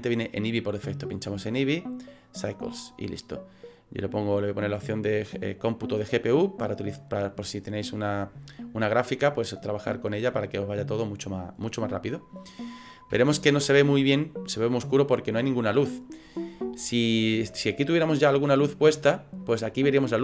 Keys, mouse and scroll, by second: 1.0 click, 3.6 click, 10.1 middle click, 11.8 middle click, 12.3 scroll up 4, 13.2 shift+middle click, 18.1 scroll down 4.